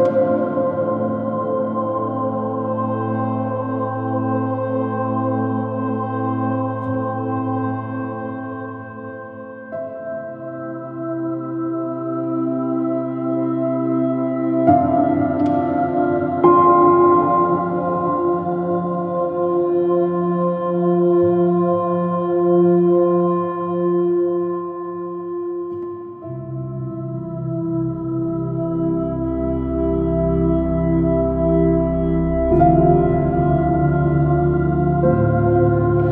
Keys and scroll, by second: 0.1 j, 8.3 s, 11.3 b, 11.6 x, 14.7 s, 15.3 j, 23.7 space, 25.5 j, 26.7 space, 29.1 space, 33.9 space, 35.1 p.